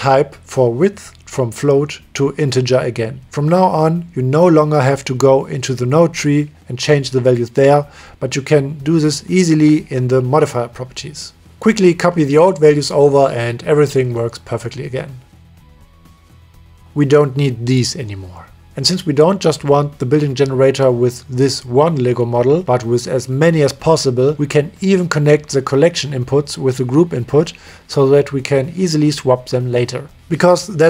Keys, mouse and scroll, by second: 0.0-0.9 drag, 3.3 click, 3.6 click, 5.0 click, 9.7-11.2 drag, 11.6 click, 13.9 click, 14.5-15.9 drag, 16.1 click, 16.9 click, 17.5 Delete, 17.9 Delete, 18.3 click, 18.8 middle click, 19.4 click, 20.2 Tab, 21.9 middle click, 23.1 middle click, 24.2 click, 24.5-26.1 drag, 28.4 click, 28.8-30.8 drag.